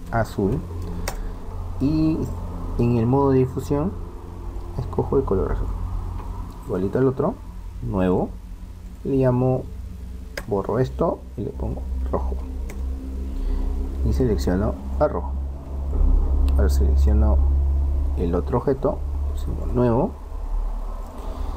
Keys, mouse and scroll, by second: 3.5-5.3 drag, 6.7-8.6 right drag, 8.1-10.7 drag, 14.1-15.9 drag, 17.0-19.0 right drag, 19.5-21.5 drag.